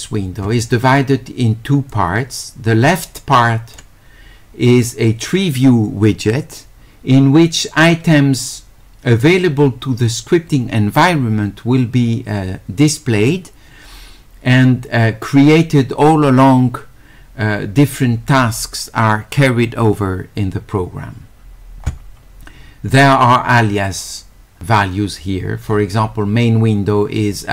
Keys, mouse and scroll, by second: 1.9-3.8 drag.